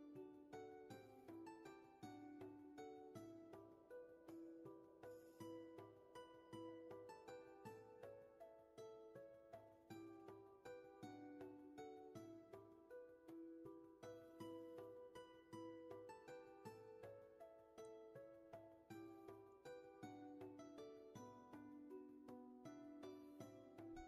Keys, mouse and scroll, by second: 1.9 ctrl+z, 13.3 ctrl+z, 14.9 ctrl+shift+z.